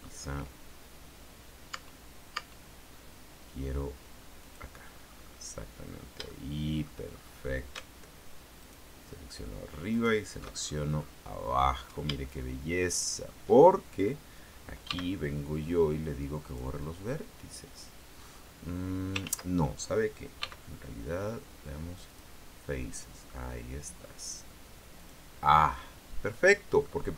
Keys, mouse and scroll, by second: 1.4-1.7 scroll down 2, 1.9 Tab, 4.6 click, 5.1-5.7 scroll up 1, 5.7-6.4 scroll up 1, 6.5 shift+middle click, 7.3-7.8 shift+scroll up 1, 8.8 alt+shift+right click, 10.1 alt+shift+right click, 10.7-11.9 alt+shift+scroll down 1, 12.4-13.6 shift+right drag, 15.1 x, 16.7 click, 17.5-17.9 scroll down 1, 18.4-18.9 scroll up 2, 19.0-19.4 scroll down 3, 19.4 ctrl+z, 20.6 x, 22.3 click, 23.1-23.5 scroll down 2, 23.5 middle click, 25.1 click, 25.7 middle click, 25.7 scroll up 1.